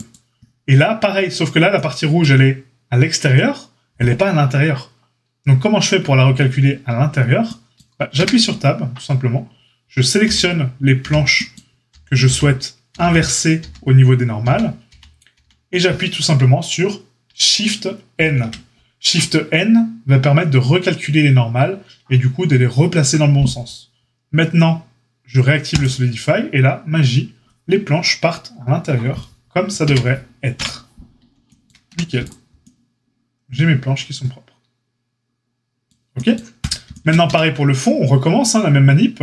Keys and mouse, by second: 0.0-36.5 middle drag, 8.1 Tab, 10.2-15.4 typing, 18.1 shift+n, 25.7 click, 29.8 Tab, 30.5 KP_Divide, 31.8 a, 36.5 click, 36.6-39.2 shift+middle drag, 37.2 Tab.